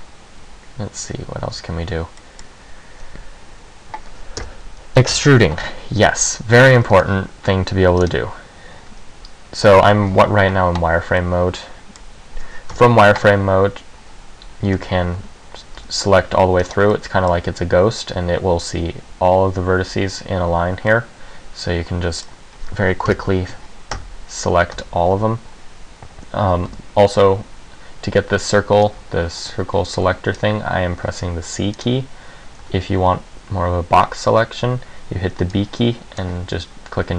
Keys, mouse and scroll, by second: 1.7 Tab, 2.4 middle click, 4.6-7.0 typing, 5.8 Tab, 8.2 click, 11.4 middle click, 12.9 KP_1, 13.4 z, 14.9 z, 15.3 a, 15.9 c, 17.1 click, 17.1 middle click, 21.0 middle click, 23.2 KP_1, 24.1 Tab, 24.9 Tab, 25.4 a, 26.8 c, 32.0 right click, 32.8 a, 34.1 b.